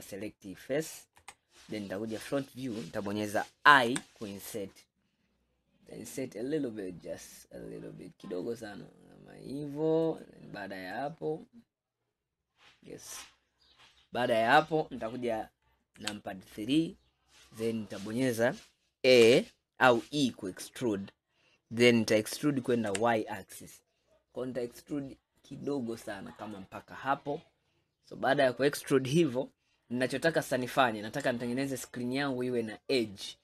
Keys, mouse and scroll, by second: 1.2 KP_1, 1.9 scroll up 5, 2.8 scroll down 1, 11.0-14.1 middle drag, 16.1 KP_3, 17.1-17.4 scroll up 2, 19.3 e, 27.2 scroll up 2, 27.8 scroll up 1, 27.8-29.7 scroll down 1, 29.7 scroll down 3, 30.4 scroll up 1, 30.9-33.4 middle drag.